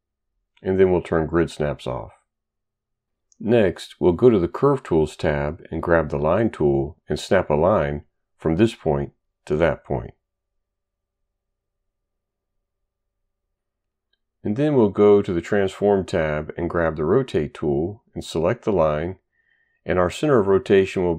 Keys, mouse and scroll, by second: 6.4 click, 8.0 click, 9.5 click, 11.1 ctrl+right click, 11.6 right click, 14.7 click, 16.3 click, 18.3 click, 19.1 Return.